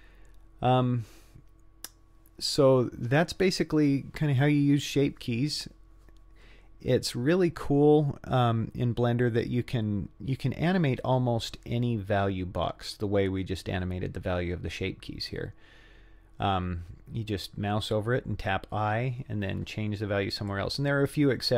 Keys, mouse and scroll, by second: 20.5-21.5 drag.